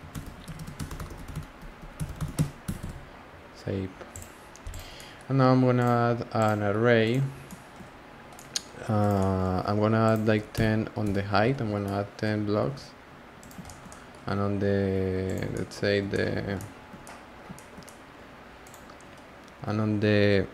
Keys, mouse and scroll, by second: 4.7 click, 4.9 scroll down 1, 4.9-5.8 middle drag, 5.8-6.6 drag, 6.6 scroll down 1, 6.6 scroll up 1, 6.7-7.0 scroll down 1, 7.0 click, 7.2 scroll down 1, 7.3 scroll up 1, 7.4 middle click, 7.9-8.3 scroll down 5, 8.3-8.7 middle drag, 8.7 scroll up 1, 9.0 click, 9.2 middle click, 10.0 click, 11.5 scroll down 5, 11.8-12.2 middle drag, 12.2-12.5 scroll up 3, 12.5 g, 15.1 scroll, 15.3 click, 15.5-18.6 middle drag, 18.6 click.